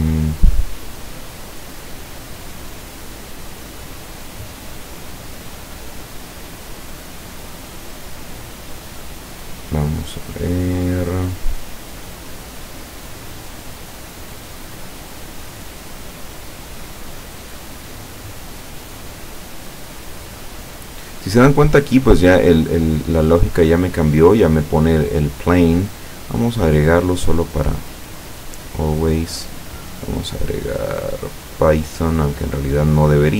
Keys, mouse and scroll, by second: 5.4 right click, 7.6 right click, 9.4 right click, 10.8 right click, 17.1-17.9 scroll down 2, 19.0 click, 20.1-20.4 scroll up 1, 21.0 scroll down 1, 25.7 click, 28.5 click, 29.6 click, 31.2 click, 32.5 click.